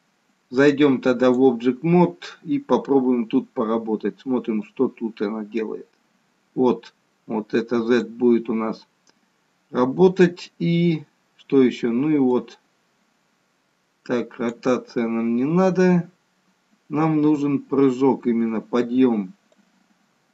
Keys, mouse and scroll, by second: 0.5 click, 4.6 click, 12.3 click, 19.6 click.